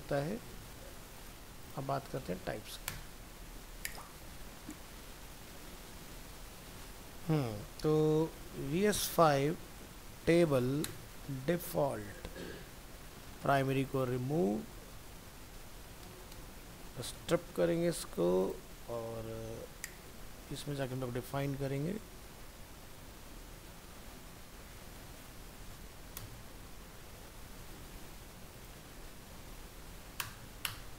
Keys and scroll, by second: 0.6 ctrl+s, 11.4 ctrl+s, 17.3 ctrl+s, 30.2 ctrl+BackSpace.